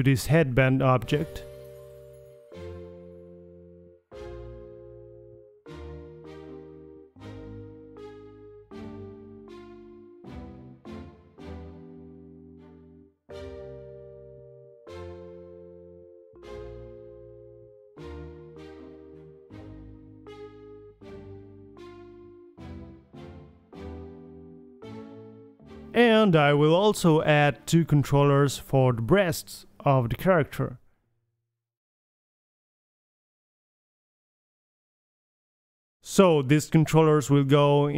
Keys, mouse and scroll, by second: 0.1 click, 0.7-1.2 drag, 1.4-2.5 drag, 2.9 click, 3.0-3.5 right drag, 3.9 click, 4.2 right click, 4.5 middle click, 6.1 g, 8.2-8.8 middle drag, 9.3-9.7 middle drag, 9.7 g, 9.8-10.2 drag, 11.2 click, 11.8 a, 11.9 a, 12.5 click, 13.0 drag, 13.1 g, 13.6 g, 14.2-15.0 drag, 14.7 g, 15.9-16.5 middle drag, 16.1 g, 17.5-18.4 middle drag, 17.8 g, 19.7-20.8 drag, 21.0 click, 21.2-21.5 middle drag, 21.5 KP_3, 21.7 a, 22.1-22.5 middle drag, 22.6-23.3 middle drag, 24.2-25.4 middle drag, 25.2 KP_1, 25.8-28.0 middle drag, 28.2 middle click, 28.8 click, 29.0 KP_3, 29.2 Tab, 29.7 shift+d, 30.2 r, 30.6 g, 32.0 g, 32.7 click, 33.3 middle click, 33.5 click, 35.1 ctrl+c, 35.6 click, 36.0 middle click, 36.3 click, 37.0-37.9 middle drag, 37.6 KP_3.